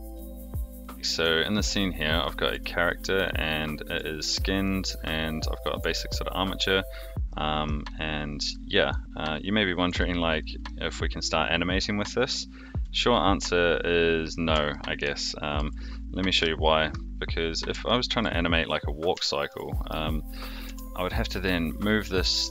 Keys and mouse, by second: 1.5 middle drag, 2.5 r, 3.8 r, 4.6 middle drag, 5.5 click, 5.8 r, 6.6-7.6 middle drag, 8.4 r, 9.3 click, 9.8 r, 10.6-14.3 middle drag, 14.7-15.0 shift+middle drag, 15.2-15.6 shift+middle drag, 16.3 KP_3, 17.8-18.2 shift+middle drag, 19.2 shift+middle drag, 20.6 r.